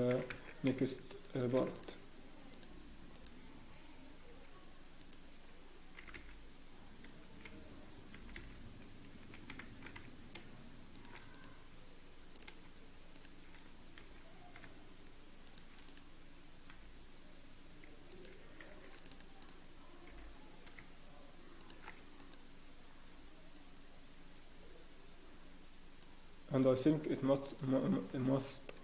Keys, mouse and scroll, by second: 0.1 e, 1.7 alt+click, 2.5 click, 5.0 alt+click, 5.9 g, 8.8 g, 10.4 g, 11.3 alt+click, 13.1 shift+click, 14.0 e, 15.8 click, 16.7 g, 18.6 ctrl+r, 19.4 click, 20.0 g, 22.2 alt+click, 23.1 scroll down 1, 23.6 scroll up 1, 26.0 click.